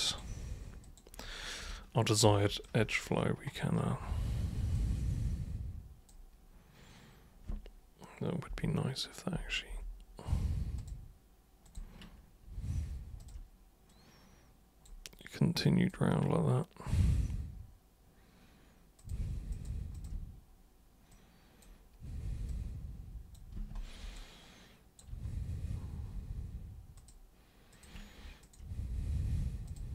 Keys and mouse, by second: 0.8 super+click, 2.6 alt+super+click, 4.7-6.0 super+drag, 10.7 super+click, 11.6 super+click, 13.2 shift+super+click, 13.8 super+click, 15.3 super+click, 19.0 click, 19.5 click, 19.9 shift+click, 21.1 click, 22.5 click, 24.1 alt+click, 26.9 super+click, 27.7 super+click, 28.4 shift+super+click, 29.7 super+click.